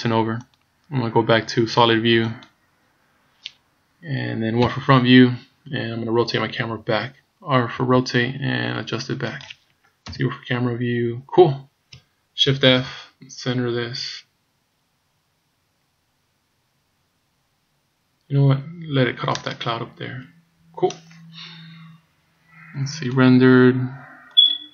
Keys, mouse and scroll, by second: 1.0 click, 4.6 KP_1, 5.8-7.8 scroll up 4, 7.8 r, 10.1 KP_0, 12.7 shift+f, 23.1 click.